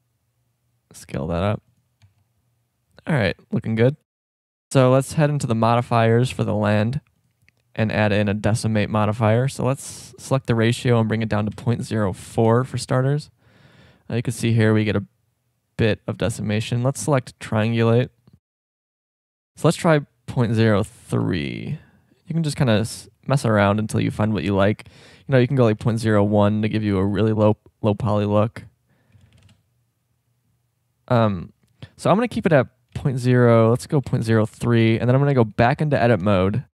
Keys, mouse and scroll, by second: 2.0 Tab, 2.5 middle click, 8.7 click, 10.1 click, 13.2-13.6 middle drag, 13.7 shift+middle drag, 13.9 shift+scroll up 1, 15.9 shift+middle click, 17.9 middle click, 22.0-22.7 middle drag, 22.7 click, 23.2-24.0 middle drag, 24.7-26.6 middle drag, 26.7 middle click, 28.7-30.1 drag, 30.5-32.1 middle drag, 32.1-33.9 drag, 35.0 shift+scroll, 36.2 Tab.